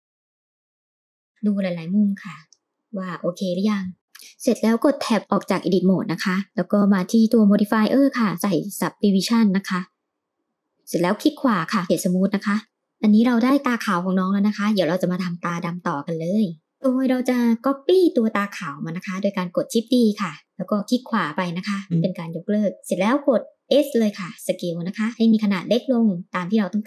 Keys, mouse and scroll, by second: 0.8-2.6 middle drag, 4.0 Tab, 8.2-10.7 drag, 11.1-12.6 right drag, 12.6 middle click, 17.7 shift+d, 24.3 s.